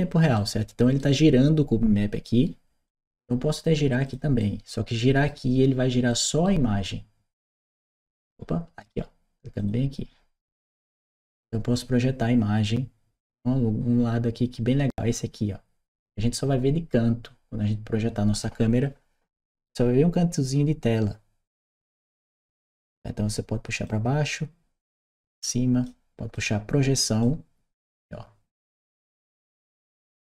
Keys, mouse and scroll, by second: 0.2 right click, 2.7 click, 3.9 click, 4.2 right click, 5.9 right click, 7.2 click, 8.7 middle click, 9.4 click, 10.5-15.8 drag, 22.5 click, 23.7-25.6 drag, 26.2 click, 27.0-30.2 drag.